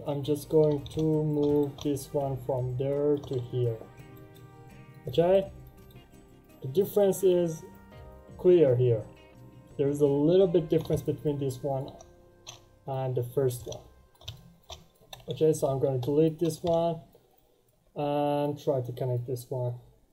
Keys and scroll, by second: 15.3 End, 15.6 Return.